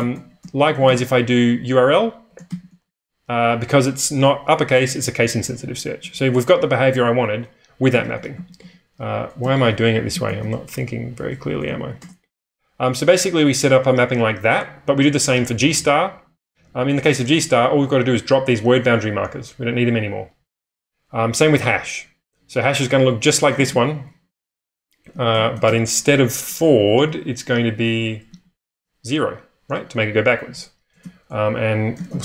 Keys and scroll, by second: 0.0-1.3 typing, 2.4 shift+8, 4.8-6.0 typing, 7.7-10.9 typing, 11.7 ctrl+k, 12.0 Return, 17.6 h, 23.3-27.3 typing, 28.4 ctrl+x, 30.6 Escape, 30.9-32.2 typing.